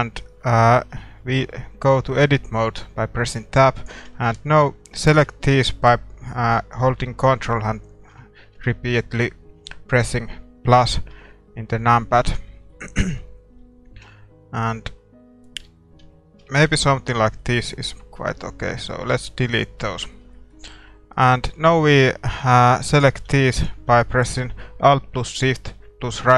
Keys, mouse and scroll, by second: 0.7 Tab, 3.2 a, 3.8-8.1 right drag, 5.2 ctrl+KP_Add, 8.1 ctrl+KP_Add, 11.3 ctrl+KP_Add, 12.7-16.4 middle drag, 17.2-26.3 middle drag, 19.2 x, 21.1-22.8 right drag, 23.1 a, 23.5-25.4 right drag.